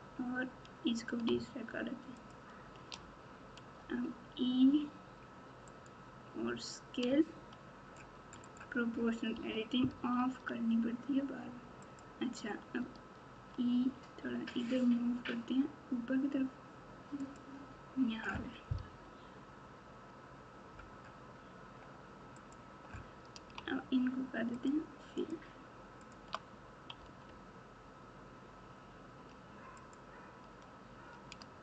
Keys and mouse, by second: 2.2 shift+click, 3.8 e, 7.0 s, 9.3 o, 12.8 e, 19.0 KP_8, 22.4 click, 24.6-26.1 shift+drag, 27.0 f, 29.7 click.